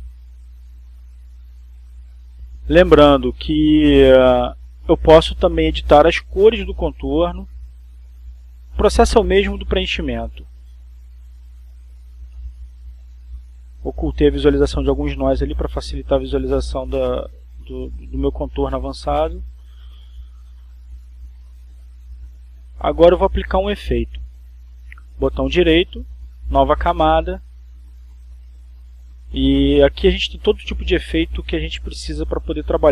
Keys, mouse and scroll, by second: 0.0 click, 1.4 click, 4.3 click, 7.8 click, 9.8-10.7 drag, 11.3-12.6 drag, 14.5-15.5 drag, 19.6 click, 21.5 click, 22.2 click, 25.5 click, 28.1 right click.